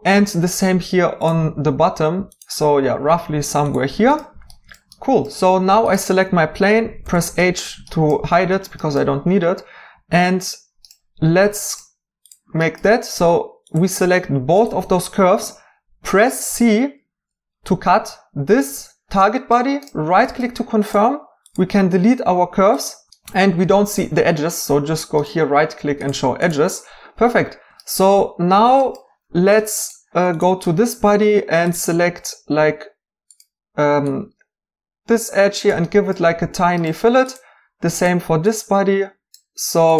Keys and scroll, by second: 7.0 h, 16.4 c, 23.1 x.